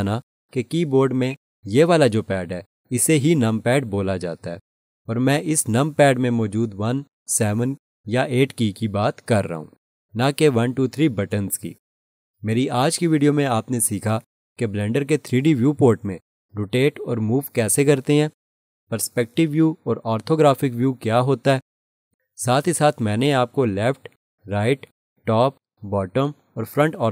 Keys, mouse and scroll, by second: 1.2 click.